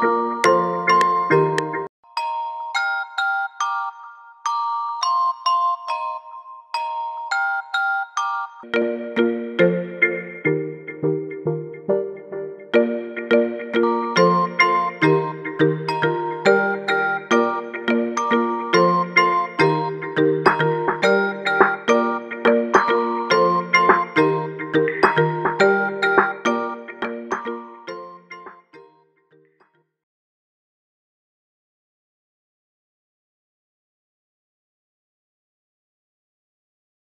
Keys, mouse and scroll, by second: 2.7 F7, 3.2 F5, 3.3 z, 6.4 F8, 6.8 F9, 15.6 F1, 15.6 click, 17.9 click, 23.3 F5, 28.3 F1, 28.8 F1.